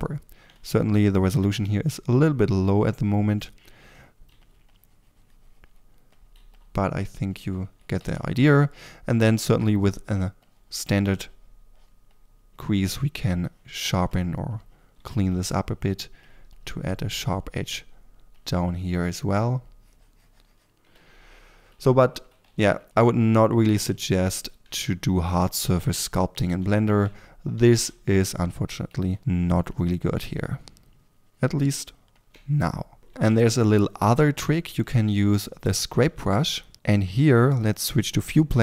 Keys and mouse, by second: 2.6 f, 4.2 f, 6.3-7.6 drag, 6.3 f, 7.6 4, 7.9 f, 21.3 4, 21.8 3, 22.4 f, 28.8 f.